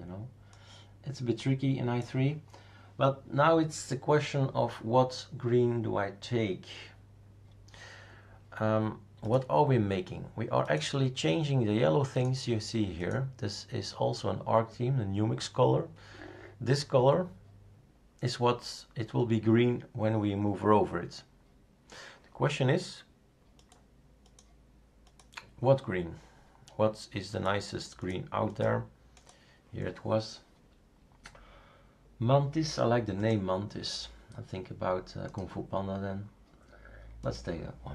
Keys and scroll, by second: 0.5 space.